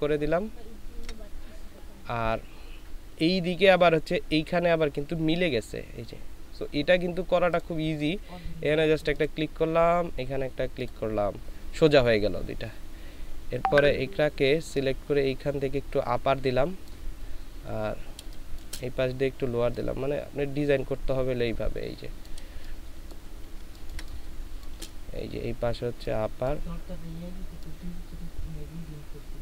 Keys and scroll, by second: 18.2 space, 22.4 space, 23.5 ctrl+space.